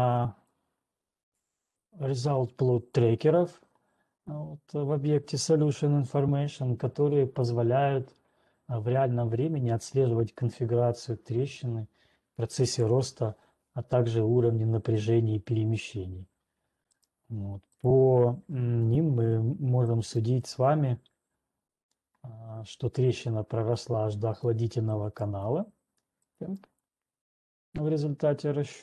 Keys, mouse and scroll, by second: 0.8 click, 3.8 click, 6.2 click, 17.4 right click, 18.6 right click, 19.4 right click, 20.4 right click, 22.4 scroll, 23.0 scroll, 24.2 scroll down 4, 24.8 scroll down 1, 25.4 right click, 26.4 scroll down 1, 27.1 right click, 28.0 middle click.